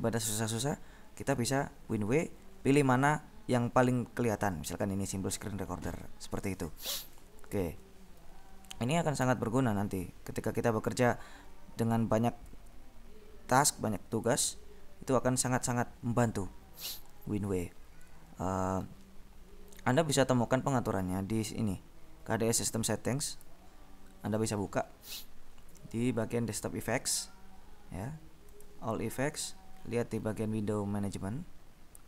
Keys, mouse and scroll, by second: 4.6 click, 9.3 alt+Tab, 12.7-15.0 drag, 23.4 click, 26.3 click, 28.6 click, 29.6-30.9 scroll down 2, 30.9-31.4 scroll up 2.